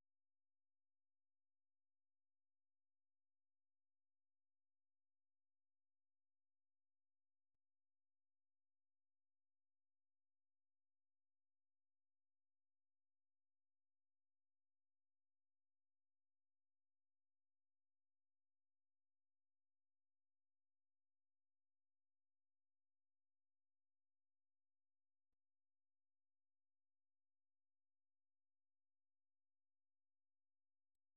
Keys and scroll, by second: 18.4 Down, 18.9 Down, 19.4 Down, 20.9 Down, 22.2-24.1 typing, 28.2-28.7 typing.